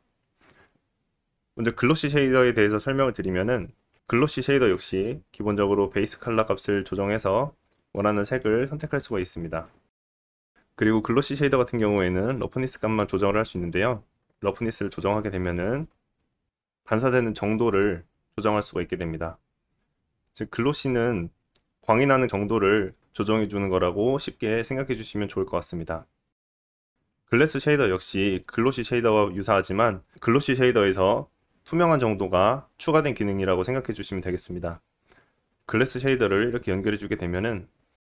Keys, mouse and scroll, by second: 1.0-5.9 drag, 1.8 scroll down 2, 2.6 middle click, 3.6 shift+middle click, 5.9-10.5 middle drag, 10.5-26.8 drag, 26.8-34.3 middle drag, 34.3-37.5 drag, 37.5-38.0 middle drag.